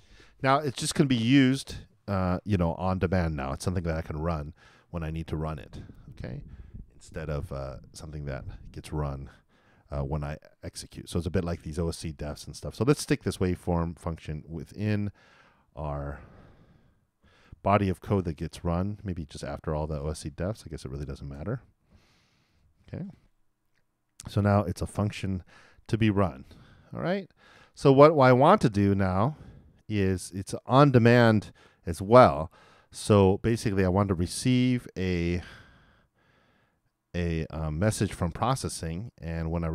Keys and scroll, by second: 17.3 super+x, 21.9 super+Return, 22.5 super+v.